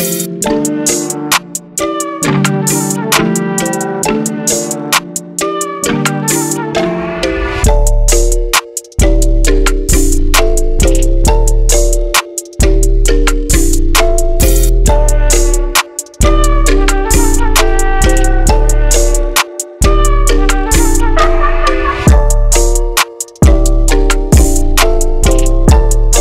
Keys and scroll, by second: 20.6-21.8 typing.